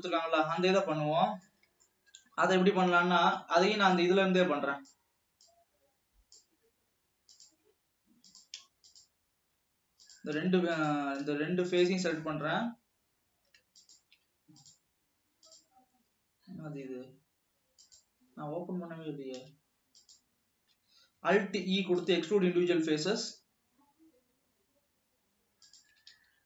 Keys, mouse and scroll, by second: 0.9 scroll down 2, 1.0-3.8 middle drag, 3.8-4.1 shift+scroll down 3, 4.5-5.8 drag, 8.5-10.8 drag, 10.9-14.4 drag, 18.9 shift+click, 20.1 shift+click, 21.5 alt+e, 23.8 s, 26.0 s.